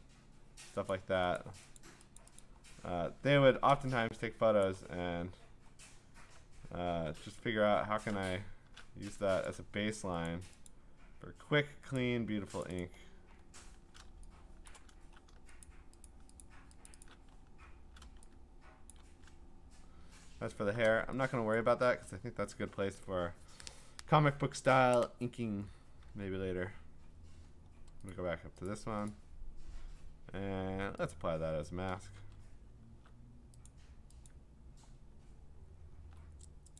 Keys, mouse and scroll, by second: 0.9 click, 1.4 click, 1.8 click, 1.9 alt+click, 2.2 click, 2.4 click, 3.0-3.5 scroll, 4.7 click, 5.6 scroll, 6.1 scroll up 11, 8.2 scroll, 9.5 shift+click, 10.3 click, 10.9 click, 11.2 shift+click, 12.0 click, 12.7 click, 13.1 click, 13.4-13.8 scroll, 14.7 click, 14.9-15.6 scroll, 15.6 shift+click, 16.1 shift+click, 16.4 shift+click, 16.9 shift+click, 17.0 shift+click, 17.3-18.1 scroll, 19.5-20.8 scroll, 21.6 click, 26.6-28.1 scroll, 28.1 click, 28.7 middle click, 28.7 click, 29.5 click, 31.1 click, 32.2-33.0 scroll, 33.3-33.7 scroll down 4, 33.7 click, 34.3 click, 35.2-35.6 scroll down 4, 35.6-35.9 scroll up 5, 36.1 scroll.